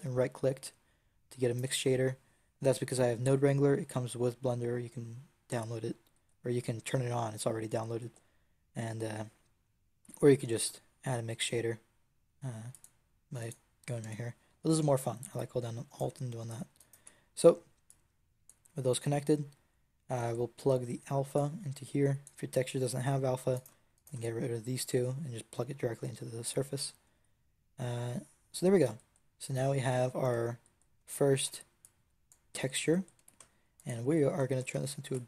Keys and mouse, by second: 0.6-2.7 drag, 10.4 shift+a, 13.9 x, 15.2-16.9 drag, 16.9 x, 17.8 click, 23.4-27.0 right drag, 27.0 a, 31.3 b, 33.0 g, 34.8 click, 35.0 ctrl+g.